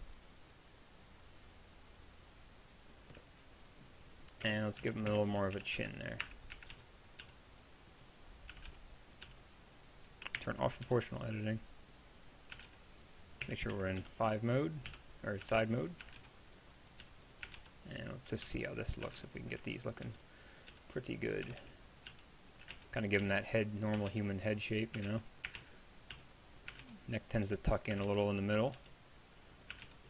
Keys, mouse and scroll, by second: 4.5-7.2 typing, 5.6 Tab, 6.3 Tab, 8.5 a, 8.7 b, 9.3 g, 10.4 o, 10.9 g, 12.6-14.0 typing, 15.5-30.0 typing.